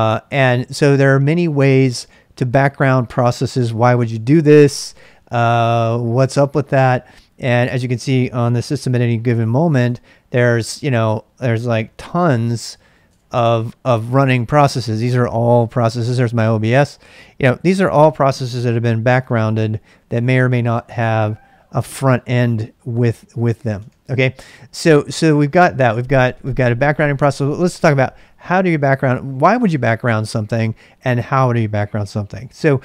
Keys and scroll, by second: 8.4 ctrl+a, 8.7-10.1 typing, 11.6-14.5 typing, 19.5 typing, 23.1-24.4 typing.